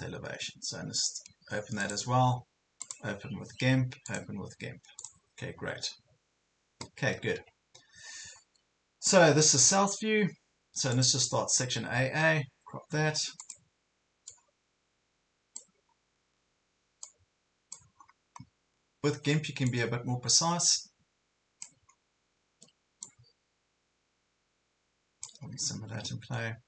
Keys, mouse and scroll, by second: 2.8 right click, 4.1 click, 8.4-8.8 ctrl+scroll down 1, 9.0 ctrl+scroll up 1, 9.8-10.6 ctrl+scroll down 1, 11.0 click, 11.8 ctrl+scroll down 1, 13.4 click, 16.0-16.4 ctrl+scroll up 2, 17.0 click, 18.2 ctrl+scroll down 1, 19.7-21.7 drag, 21.9 ctrl+scroll down 1, 23.0-25.4 drag, 25.6 ctrl+scroll down 1, 26.0 ctrl+scroll up 1.